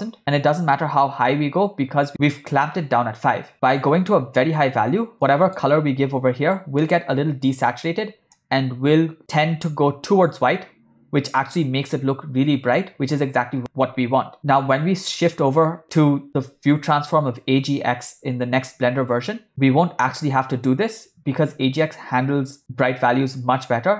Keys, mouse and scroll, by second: 0.1 0, 5.3 middle click, 6.9 click, 11.7 shift+middle click, 14.4 middle click.